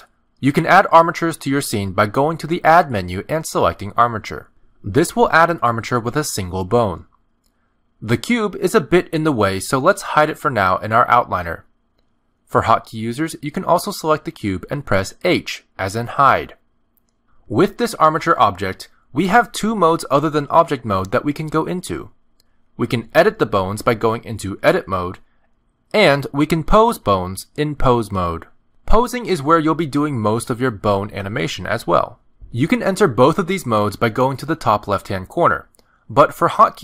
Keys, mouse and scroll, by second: 3.1 click, 8.2 click, 11.5 click, 15.5 click, 16.2 h, 20.4 click, 22.3 click, 26.8 click, 29.2 click, 31.1 r, 33.2 click, 34.5 click, 34.8 click, 36.2 click.